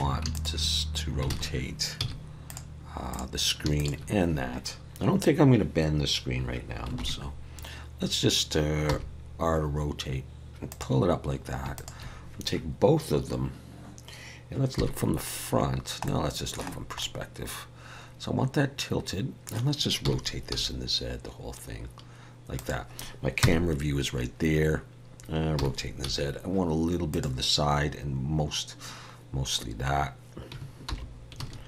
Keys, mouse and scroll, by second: 0.3 shift+click, 0.6 shift+click, 1.3 alt+a, 2.0 z, 3.1 click, 3.8 shift+click, 7.0 ctrl+KP_3, 8.9 r, 11.7 shift+click, 14.8 KP_1, 15.7-16.1 scroll down 2, 16.1 middle click, 16.7 scroll down 1, 17.0 middle click, 20.0 r, 23.4 KP_0, 25.5 r, 30.9 alt+h, 31.4 alt+a.